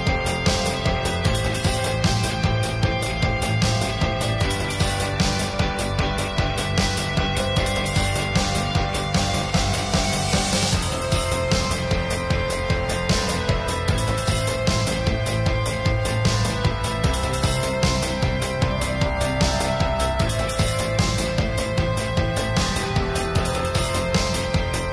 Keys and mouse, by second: 0.2 n, 0.7 ctrl+s, 1.2-2.0 [, 2.4 shift+space, 3.4-4.5 drag, 4.8 click, 5.7-6.0 middle drag, 6.0-8.3 drag, 8.3-9.2 middle drag, 9.1-9.5 drag, 10.0-10.5 drag, 10.7 middle click, 11.3-11.6 drag, 11.9-12.6 drag, 12.6-13.2 middle drag, 13.2 ], 13.4 click, 13.4 ], 14.4 middle click, 15.3 ctrl+s, 15.5 middle drag, 15.8-16.1 middle drag, 16.9 middle click, 17.4-19.1 middle drag, 20.5 ctrl+s, 20.7 shift+space, 21.1 alt+s, 21.7 shift+space, 23.5-24.1 middle drag, 24.1 click.